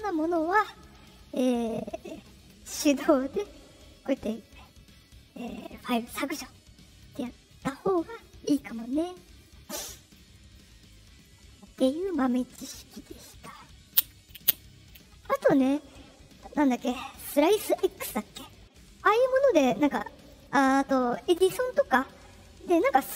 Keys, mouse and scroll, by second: 0.5 click, 2.3 right click, 5.3 click, 7.0 click, 9.4 click, 19.3 click.